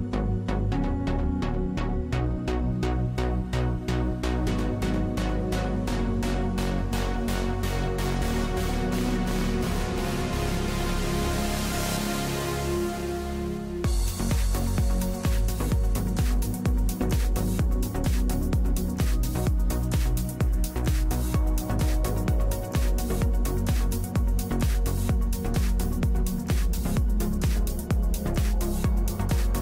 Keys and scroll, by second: 2.2 p, 6.1 e, 9.1 F3, 10.0 x, 14.1 F3, 21.1 F3, 29.1 F3.